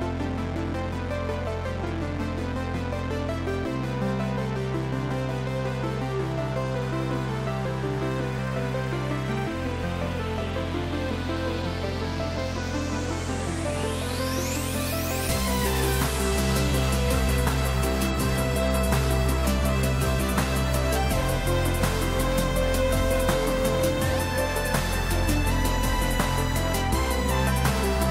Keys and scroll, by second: 0.1 ctrl+j, 6.7 ctrl+t.